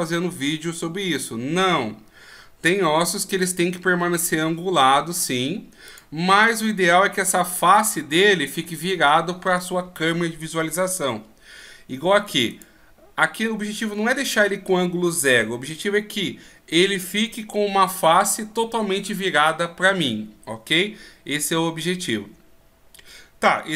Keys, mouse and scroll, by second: 12.5 right click.